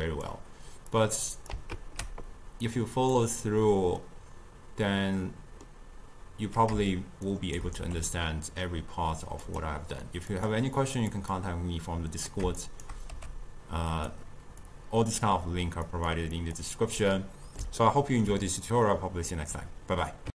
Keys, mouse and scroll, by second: 1.0 click, 1.8 ctrl+x, 2.7-4.1 drag, 4.1-7.1 middle drag, 7.3 shift+right click, 7.9 g, 10.4 click, 11.0 click, 11.4-12.7 drag, 12.7 shift+right click, 13.2 g, 14.7 click, 16.0 click, 16.5 click, 17.2-20.3 middle drag.